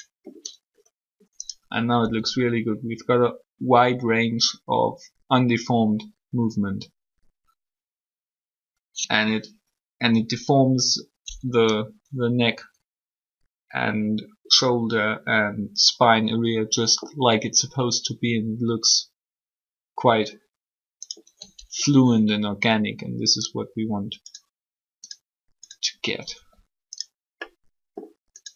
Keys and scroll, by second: 2.0 r, 21.6 r, 26.3 r.